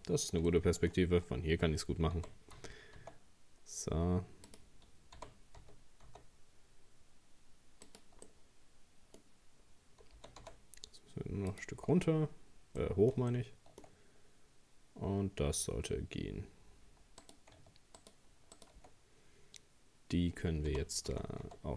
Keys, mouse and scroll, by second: 0.5 shift+middle click, 1.3-2.2 scroll up 1, 2.2 g, 5.2 g, 8.3-9.9 middle drag, 9.9 scroll down 1, 10.2 g, 12.8-15.4 middle drag, 15.4-16.8 scroll down 2, 17.2 right click, 18.0 shift+right click, 18.6 shift+right click, 20.7 g.